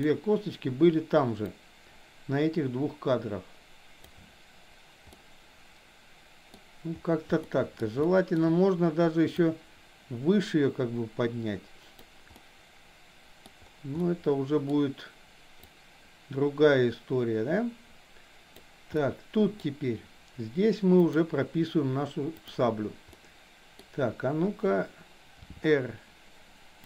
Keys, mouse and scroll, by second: 1.6-4.1 drag, 5.2-6.5 middle drag, 7.5 middle click, 8.1 shift+middle drag, 9.3-12.1 drag, 12.3-13.3 middle drag, 14.1-14.7 middle drag, 15.7-18.7 drag, 19.0-19.7 middle drag, 21.0 click, 23.1 middle click, 25.3 r.